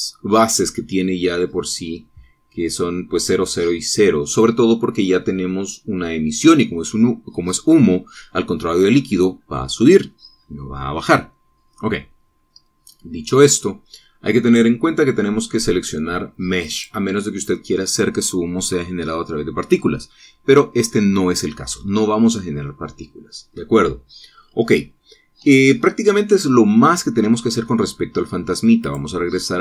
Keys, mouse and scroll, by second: 15.4 click, 17.7 click, 25.3-25.7 scroll up 2, 25.9 scroll up 2, 26.4-27.0 scroll down 2.